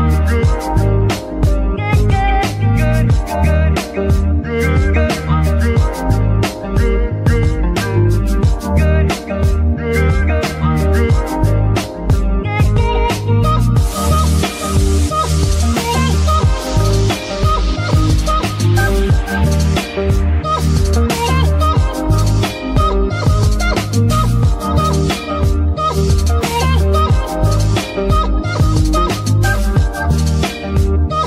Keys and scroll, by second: 0.8 g, 1.1 x, 2.2 z, 4.5 g, 4.7 x, 16.0 g, 17.5 Escape, 25.3 shift+g, 27.8 Escape, 29.2 KP_3.